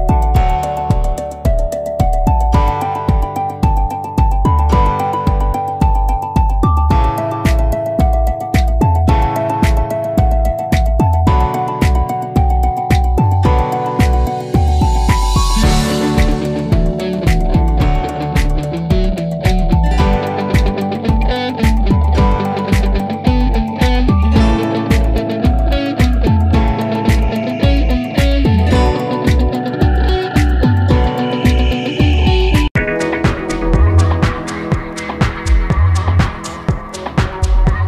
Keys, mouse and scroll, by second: 0.9 click, 4.8 click, 6.5 click, 7.9 click, 8.8 click, 10.5 click, 13.2 ctrl+alt+z, 13.5 alt+click, 18.4-23.7 drag, 23.9 click, 24.9 click, 29.0 click.